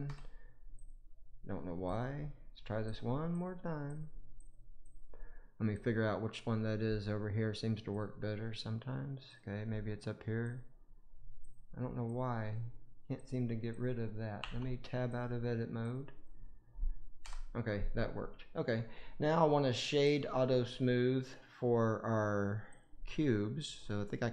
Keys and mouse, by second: 1.3 click, 2.2 click, 2.3 middle click, 3.3 click, 3.8 click, 4.3 click, 4.7 click, 5.6 click, 7.8 click, 10.3 click, 12.1 click, 13.6 click, 14.3 Tab, 15.8-16.2 drag, 17.2 Delete, 18.1-18.7 middle drag, 20.0 right click, 20.1-21.7 drag.